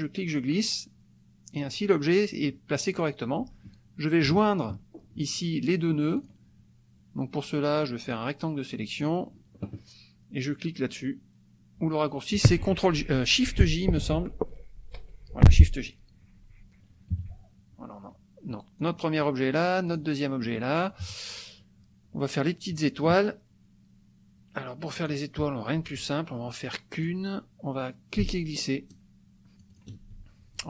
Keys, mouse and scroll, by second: 4.3 shift+click, 6.1 click, 8.1-9.2 drag, 15.0 shift+j, 17.1 KP_Subtract, 18.8 click, 19.9 click, 20.4 click, 20.9 click, 25.0 click, 26.5 click, 28.2-30.0 ctrl+shift+drag.